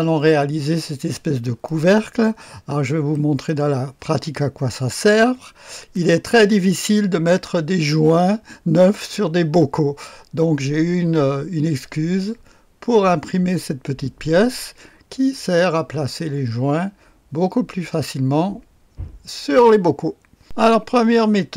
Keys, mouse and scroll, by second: 1.7 click, 3.1 middle click, 3.5 click, 5.6 click, 20.4 click.